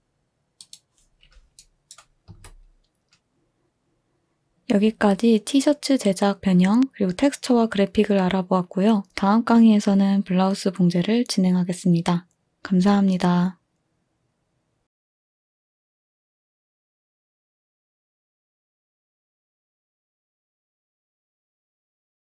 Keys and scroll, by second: 2.3 2, 4.5 Delete.